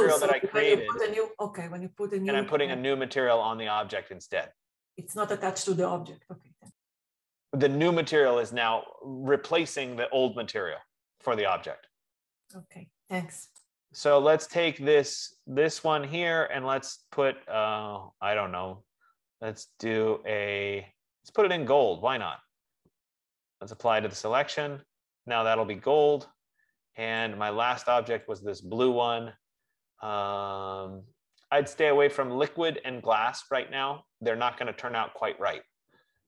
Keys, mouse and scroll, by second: 15.7 click, 17.9 scroll, 18.7-19.8 scroll, 20.0 scroll, 22.6 right click, 24.4 click, 27.5 click, 28.8 click.